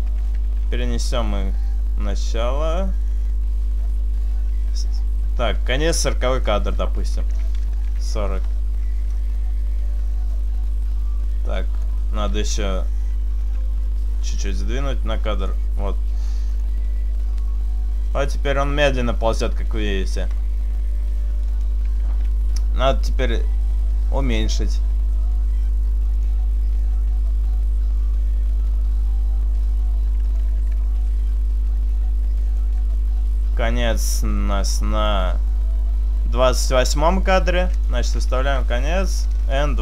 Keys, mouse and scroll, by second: 0.5 click, 0.5 g, 10.3 click, 14.3 g, 16.7 click, 23.9 s, 26.9 s, 30.9 click, 30.9 g, 34.5 click.